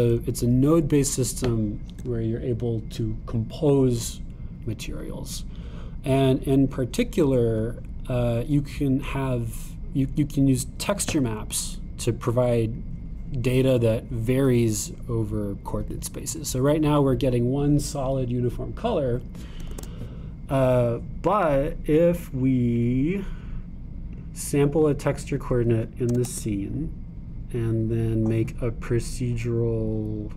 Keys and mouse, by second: 1.1-26.2 drag, 20.7 shift+a, 27.1 shift+a.